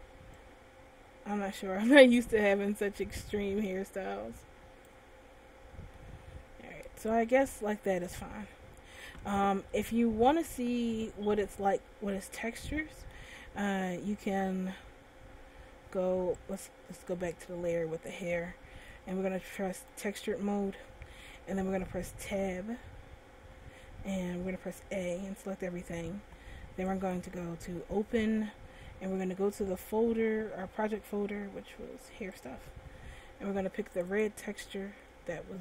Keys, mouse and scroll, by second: 0.6 click, 5.6-6.1 scroll down 1, 6.1 middle click, 8.5-9.1 scroll up 2, 9.9 middle click, 12.3 middle click, 16.5 click, 18.1 scroll down 1, 19.9 click, 22.7 Tab, 25.1 a, 27.5 click.